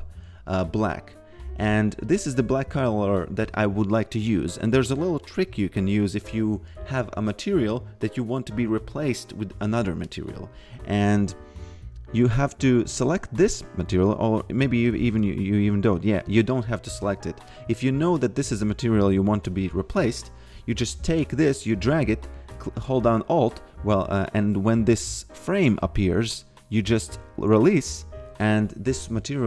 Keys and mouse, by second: 2.0 click, 4.7 click, 12.9 click, 17.0 ctrl+z, 17.5 click, 20.5 click.